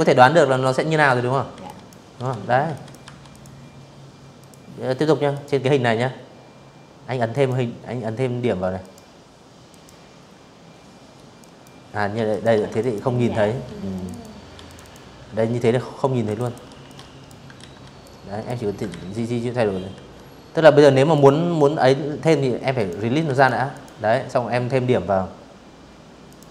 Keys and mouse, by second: 0.0-1.2 typing, 0.4 click, 1.0 click, 2.0 click, 3.0 click, 4.9 click, 6.4 click, 7.3 click, 9.0 click, 10.0 alt+click, 10.4 ctrl+click, 11.3 v, 11.6 click, 11.7 click, 12.2 v, 12.3 click, 12.5 click, 13.9 ctrl+click, 14.1 ctrl+click, 14.4 x, 14.5 alt+click, 15.3 ctrl+z, 15.7 click, 16.6 ctrl+z, 17.6 v, 18.8 click, 20.4 click, 20.9 v, 21.0 click, 21.4 click, 24.0 click.